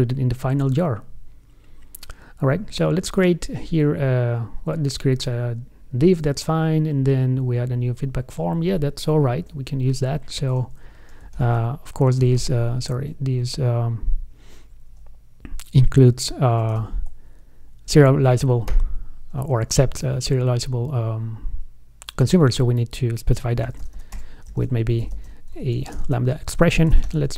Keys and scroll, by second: 17.0 ctrl+space.